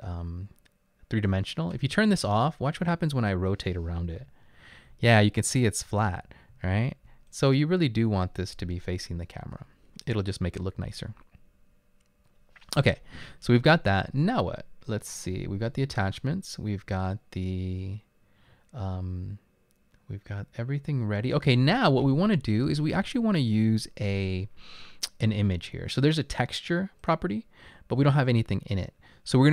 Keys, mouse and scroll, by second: 4.4-4.9 typing, 6.5-9.3 typing, 11.5-12.2 typing.